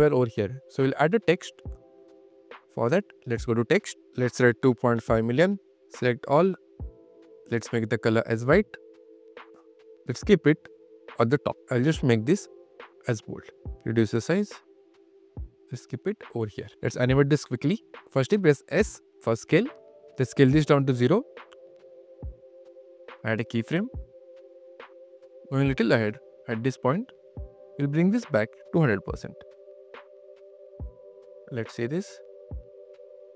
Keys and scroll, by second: 16.8 q, 18.7 s, 19.2 q, 21.5 0, 22.0 q, 28.9 1, 29.4 0.